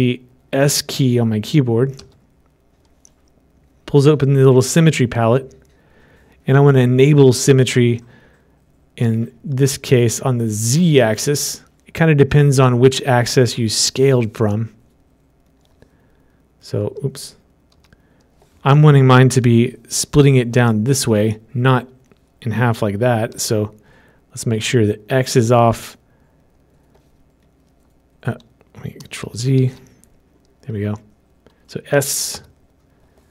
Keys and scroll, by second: 29.6 ctrl+z.